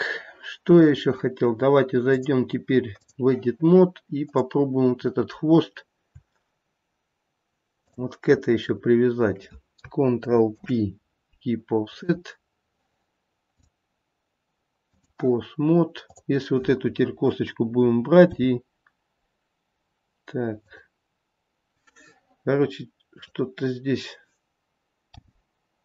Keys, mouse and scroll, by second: 2.3 click, 6.2 click, 8.0 shift+click, 10.7 ctrl+p, 13.8 click, 16.3 click, 18.5 g, 23.4 click, 25.3 g.